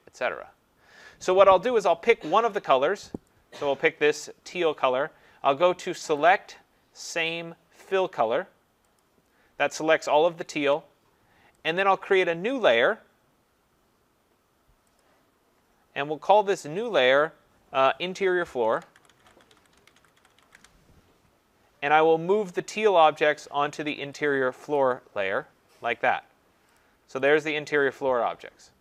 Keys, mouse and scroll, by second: 3.3 click, 6.2 click, 9.0 click, 11.7 click, 15.0 click, 16.8 click, 17.1 click, 18.6-21.0 typing, 23.5 typing, 24.8 click, 26.8 click, 27.3 click.